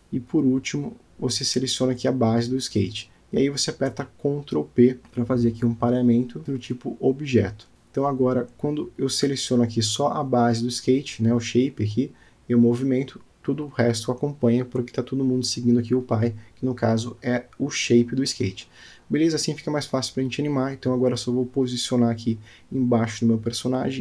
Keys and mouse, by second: 1.0-2.3 shift+drag, 2.8-4.3 middle drag, 5.5 ctrl+p, 10.1-10.7 drag, 12.6 g, 17.4-18.6 middle drag, 18.8 shift+middle click, 19.4 click, 20.7 g, 23.5-24.0 middle drag.